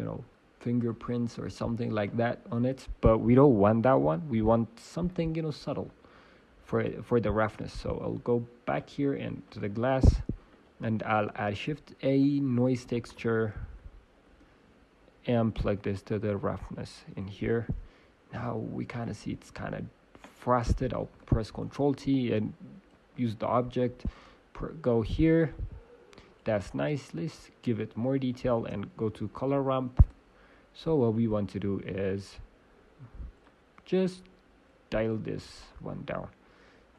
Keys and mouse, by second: 6.2-14.3 drag, 14.3 shift+a, 17.1 click, 18.9-22.7 drag, 21.1 ctrl+t, 23.3-24.4 drag, 26.7-30.3 drag, 28.5 shift+space, 31.7 click, 33.4-36.9 drag.